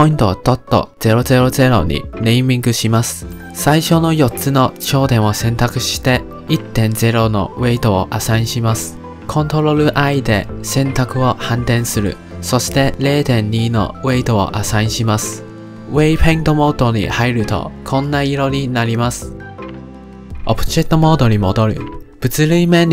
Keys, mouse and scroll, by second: 3.8 click, 6.1-10.5 drag, 10.5 ctrl+i, 11.9-15.2 drag, 15.2 middle click, 15.8 ctrl+Tab, 17.0-19.8 middle drag, 21.0 ctrl+Tab, 22.6-22.9 middle drag.